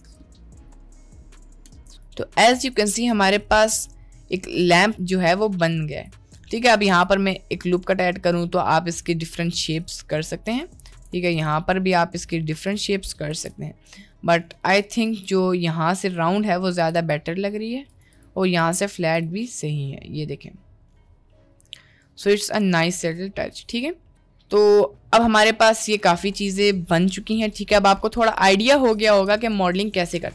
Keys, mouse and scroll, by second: 1.2 shift+middle drag, 1.6 click, 1.9 drag, 2.2-2.6 shift+middle drag, 3.0 middle drag, 3.6-4.0 middle drag, 4.4-4.8 middle drag, 4.9 click, 5.1 Tab, 5.4 shift+middle click, 6.2 middle click, 6.8 ctrl+r, 11.1 ctrl+r, 13.3 ctrl+b, 15.2 ctrl+z, 16.4 middle click, 16.8 g, 18.2 click, 18.5 Tab, 19.4-21.0 middle drag, 21.3-22.7 middle drag, 23.4 middle click, 24.0-24.5 middle drag, 25.5 click, 26.1-26.7 middle drag, 28.2-28.5 middle drag.